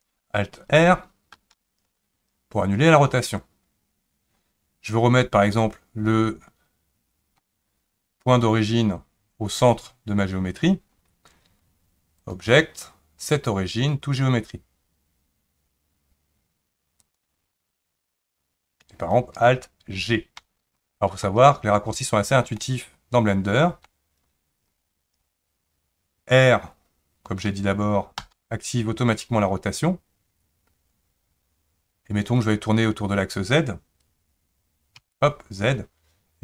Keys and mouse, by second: 1.4 alt+r, 12.2-17.2 drag, 20.4 alt+g, 22.6-23.8 middle drag, 28.2 r.